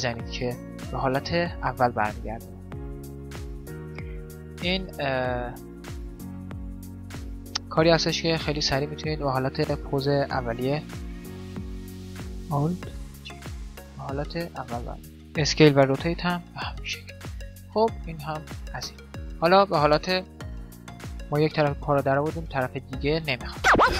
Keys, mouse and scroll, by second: 3.8 a, 6.2-9.4 middle drag, 9.4 click, 9.4 right click, 10.8 click, 11.2 middle click, 11.4 alt+g, 11.4 right click, 12.6 alt+g, 13.3-15.1 middle drag, 15.1 s, 15.5 r, 16.3-19.7 middle drag, 17.7 a, 20.7 KP_7.